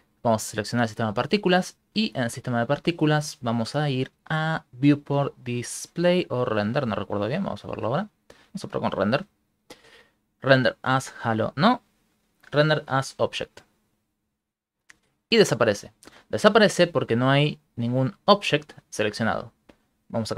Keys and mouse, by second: 0.2 click, 0.2 right click, 2.5 click, 3.5 middle click, 7.5 click, 8.9 click, 9.5 middle click, 11.5 click, 18.2 click.